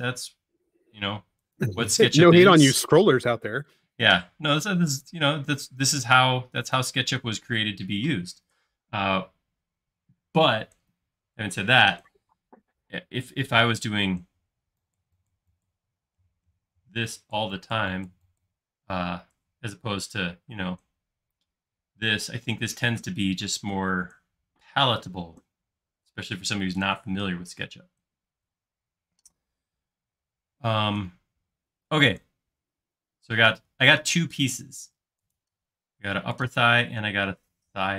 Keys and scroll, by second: 3.4 m, 7.2 space.